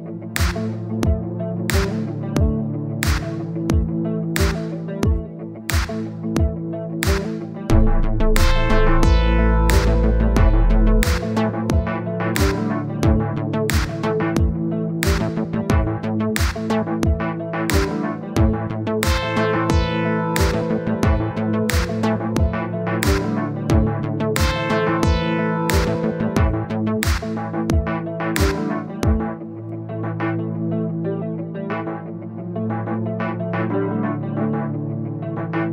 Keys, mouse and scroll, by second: 2.5 middle click, 3.0-4.1 drag, 4.1 scroll down 3, 4.3 middle click, 4.5 scroll up 2, 4.7-9.8 drag, 9.8 middle click, 10.6-13.8 drag, 14.1 middle click, 14.9 scroll down 2, 15.1 middle click, 15.9 click, 16.1-17.6 middle drag, 18.0-19.2 drag, 19.3 scroll up 1, 19.6-21.5 drag, 21.8-23.0 middle drag, 23.1-26.0 drag, 26.0 middle click, 26.7-28.9 drag, 29.1-31.5 drag, 31.5 middle click, 32.0-33.8 drag, 33.8 middle click, 34.4-35.4 drag, 35.4-35.7 middle drag.